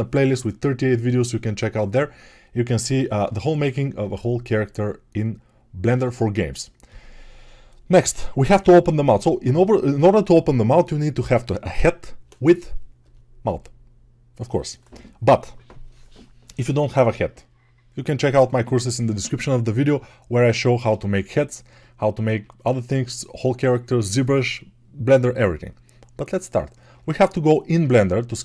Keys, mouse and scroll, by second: 26.3 click, 27.3 ctrl+Tab.